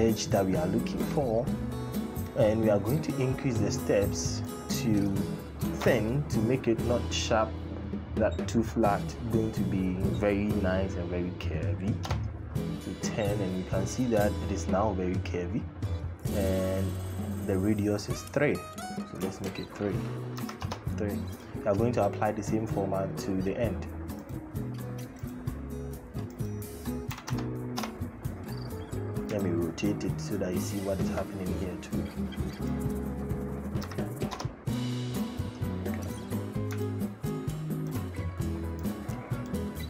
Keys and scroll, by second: 5.5 typing, 11.8 Return, 20.1 KP_3, 20.4 Return, 26.9 KP_1, 27.0 KP_0, 28.3 Return, 33.6 KP_3, 34.0 Return.